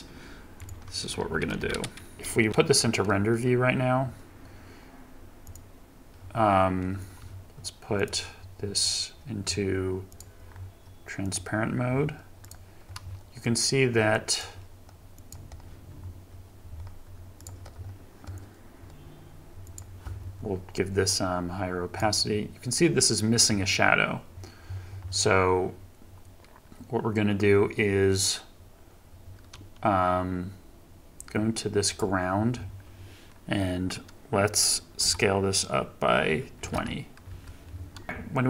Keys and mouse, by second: 0.6 click, 1.3 shift+Left, 2.1 ctrl+Tab, 2.5 z, 10.1 click, 11.2 click, 13.5 click, 15.2 click, 19.6 click, 35.0 s, 36.6 2, 36.8 0, 37.4 Return.